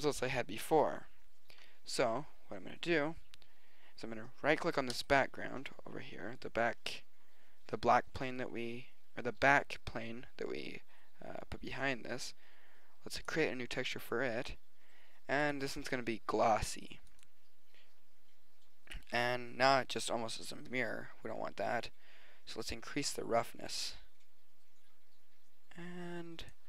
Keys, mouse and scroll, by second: 5.0 right click, 15.1 middle click, 17.5 click, 22.6 click.